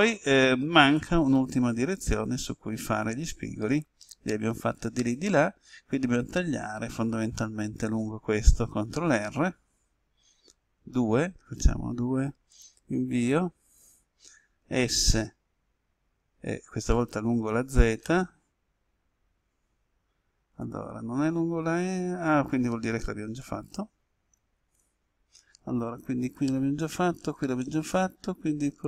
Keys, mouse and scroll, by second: 8.8 middle click, 10.9 2, 12.4 Return, 14.5 s, 23.5 right click, 24.5 ctrl+z, 27.5-28.8 middle drag.